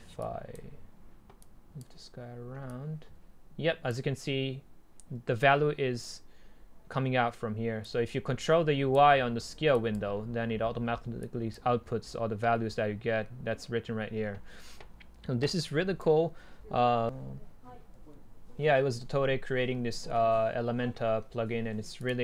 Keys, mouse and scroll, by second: 3.4-6.0 middle drag, 8.0 middle click, 11.4-13.6 drag, 15.8-16.7 right drag, 16.7-17.0 scroll down 2, 17.0-18.2 drag, 19.1-19.6 scroll down 2, 19.6-21.8 scroll up 2, 21.8 scroll up 1, 22.1-22.2 drag.